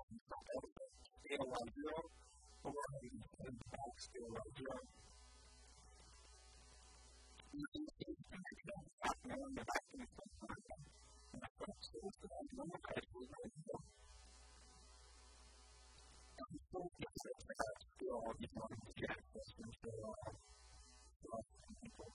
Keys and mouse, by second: 1.0 s, 2.1 a, 2.3 b, 3.3 b, 3.9 s, 10.5 a, 10.7 a, 11.1 a, 11.7 ctrl+r, 13.7 click, 14.0-16.2 typing, 17.6 s, 18.8 a, 19.1 b, 20.3 s, 21.3 a, 21.5 b.